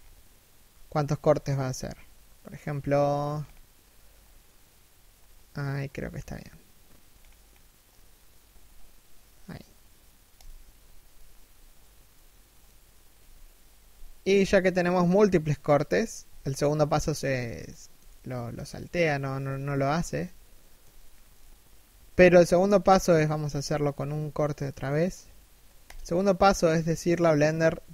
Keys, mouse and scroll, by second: 11.6 middle click, 12.6 KP_1, 15.8 a, 17.6 shift+middle click, 19.0 KP_3, 19.3 KP_1, 19.9 shift+middle click, 21.9-22.5 scroll up 1, 23.0 k.